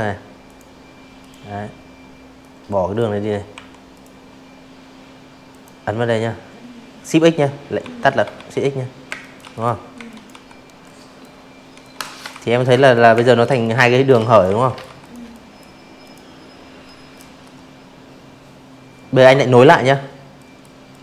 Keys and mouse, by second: 0.5 Delete, 0.9 click, 2.5 click, 4.8-12.3 typing, 6.2 click, 6.5 click, 7.1 click, 7.8 click, 8.8 click, 9.9 click, 10.2 click, 10.6 click, 10.9 click, 11.3 click, 11.6 click, 12.0 click, 12.3 click, 13.0 click, 17.3 drag, 17.9 click, 20.9-21.0 drag.